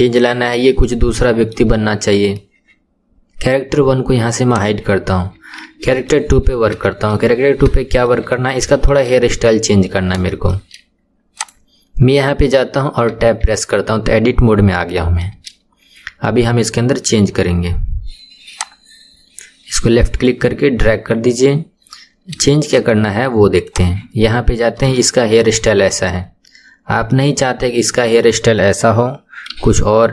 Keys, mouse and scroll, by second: 4.5 click, 5.5-6.3 shift+middle drag, 6.3-6.9 scroll up 2, 6.9-7.3 shift+middle drag, 7.3-7.7 scroll up 2, 7.7-8.2 shift+middle drag, 8.2-8.7 scroll up 3, 8.7-9.8 shift+middle drag, 9.8-10.2 scroll down 2, 10.2-11.3 shift+middle drag, 11.3 click, 13.1 Tab, 14.2 scroll up 2, 14.9-18.5 shift+middle drag, 18.5-21.5 drag, 21.9-22.5 scroll up 2, 22.5-23.7 shift+middle drag, 23.7 click, 24.5-25.0 scroll up 2, 25.0-26.7 shift+middle drag, 26.7-27.1 scroll down 2, 27.1-29.5 middle drag, 29.5 KP_7, 30.0-30.1 scroll down 2.